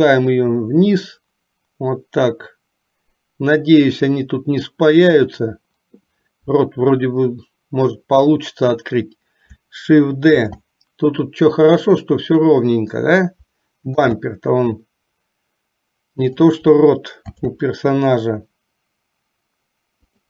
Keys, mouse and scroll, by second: 0.1-5.2 drag, 10.3 shift+d, 14.1 shift+d, 17.5 shift+d.